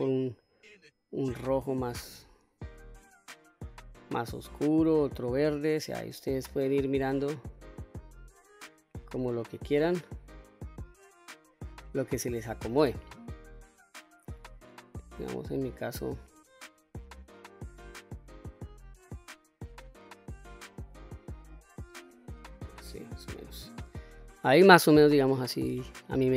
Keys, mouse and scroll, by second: 21.2 click, 22.0-22.4 scroll down 1, 22.4-23.9 middle drag, 24.3 middle click, 25.2 middle click.